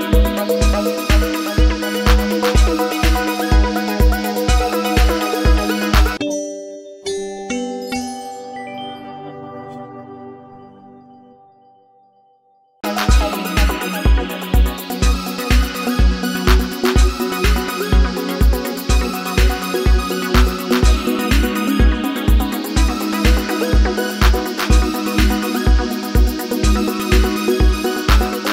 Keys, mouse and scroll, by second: 14.3 double click, 24.9 double click.